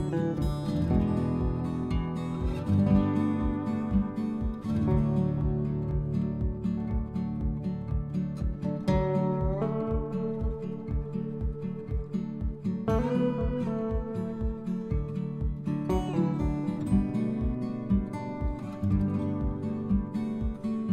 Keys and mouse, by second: 0.3 click, 0.6 s, 1.4 click, 1.7 g, 3.0 click, 3.4 middle click, 4.5 click, 5.4 g, 5.6 z, 6.1 click, 6.8 g, 7.5 x, 8.5 click, 9.5 click, 10.6 click, 11.2 click, 12.0 click, 13.5 g, 13.7 x, 14.5 click, 15.1 r, 18.2 click, 18.9 g, 18.9 z, 20.6 click.